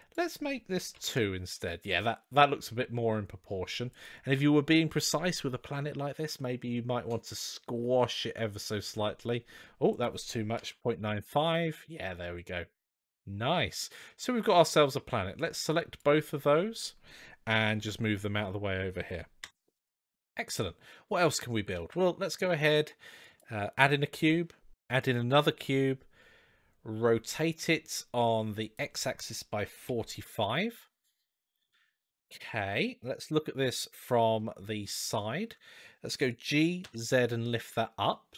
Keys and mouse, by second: 1.7-3.4 middle drag, 3.8 click, 7.1-8.4 drag, 8.7-9.4 middle drag, 9.7-11.4 drag, 11.7-13.7 middle drag, 15.3-15.8 drag, 17.5 g, 20.3-21.1 middle drag, 21.5 shift+a, 24.1 shift+a, 28.4-31.0 drag, 32.0-32.4 shift+middle drag, 33.1 KP_3, 34.9-35.2 shift+middle drag, 36.0 g.